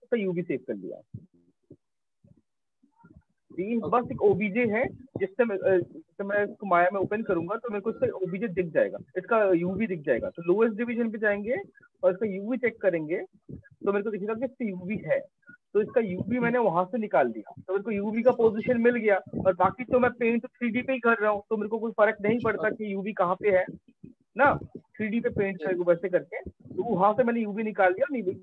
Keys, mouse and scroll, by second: 6.1 click, 9.9 click, 10.7 click, 11.7 click, 12.8 click, 19.7 click, 20.2 right click, 24.0 click, 26.0 click.